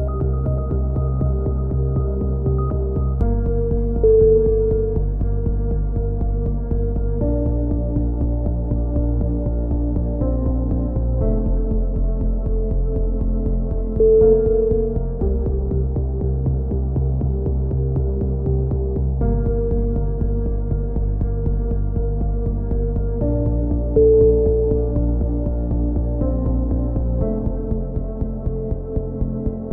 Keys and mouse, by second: 1.2 click, 1.2 a, 2.9 right click, 3.5 f, 3.6 a, 5.1 right click, 5.5 ctrl+z, 5.9 e, 7.8 KP_7, 8.1 z, 8.3 click, 10.2-12.1 typing, 12.4 click, 13.0 right click, 13.2 KP_1, 13.3 z, 13.5 middle click, 13.7-15.0 drag, 15.1 KP_7, 15.3 z, 15.4 z, 16.6 click, 17.4 KP_1, 17.6 KP_3, 18.5 KP_1, 18.8 right click, 19.2 click, 22.1 click, 22.3 a, 22.3 z, 23.9-27.9 drag, 27.9 right click, 28.7 ctrl+r, 28.7 a.